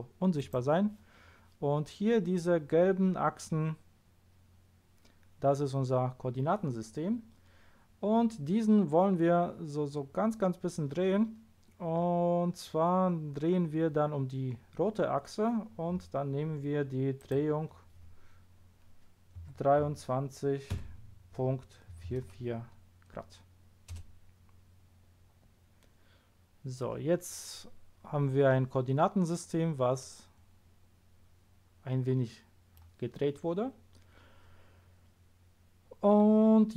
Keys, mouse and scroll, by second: 0.3 click, 17.1 click, 19.4 2, 19.8 3, 21.9 4, 23.9 Return.